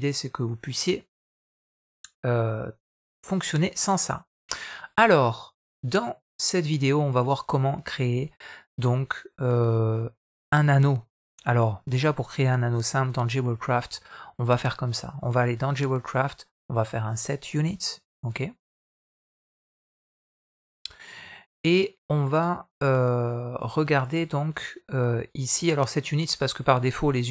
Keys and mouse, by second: 17.7 click.